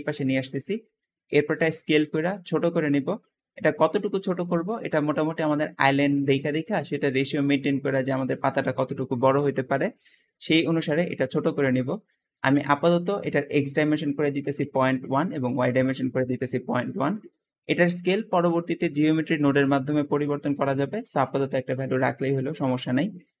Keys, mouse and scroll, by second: 0.5 shift+middle click, 0.8-1.6 scroll up 2, 1.3 s, 2.9 click, 3.9-4.4 drag, 4.9 shift+click, 4.9-9.9 shift+middle drag, 9.9-11.0 scroll up 3, 10.3 shift+middle click, 11.0-11.8 shift+middle drag, 11.8-12.1 scroll up 1, 12.1-13.2 shift+middle drag, 13.2 shift+click, 14.0 ., 14.3 KP_1, 14.6 Tab, 15.1 ., 15.4 KP_1, 15.8 Return, 16.9 middle click, 16.9-17.4 scroll up 4, 17.4-20.5 shift+middle drag, 21.6-22.0 scroll down 3, 22.0-22.5 middle drag, 22.5-23.4 scroll up 3.